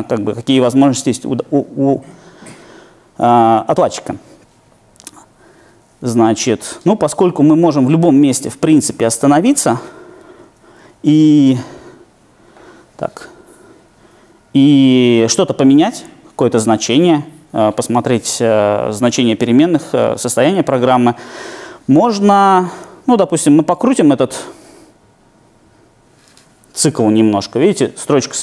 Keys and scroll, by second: 8.5 super+F8, 23.1 alt+super+r.